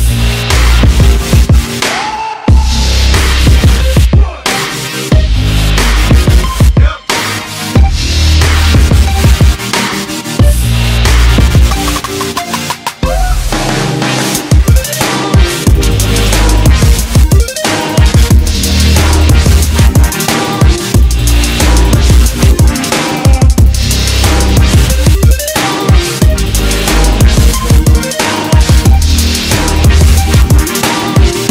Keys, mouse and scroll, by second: 0.3 g, 7.5 alt+m, 18.5 g, 23.0 right click, 24.5 g, 30.2 g.